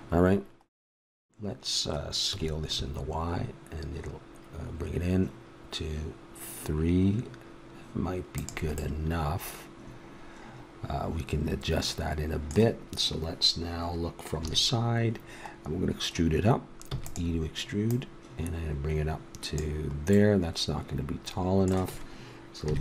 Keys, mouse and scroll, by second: 0.1-4.2 middle drag, 2.2 s, 8.7-10.8 middle drag, 14.4 KP_3, 16.8 e, 22.6 KP_3.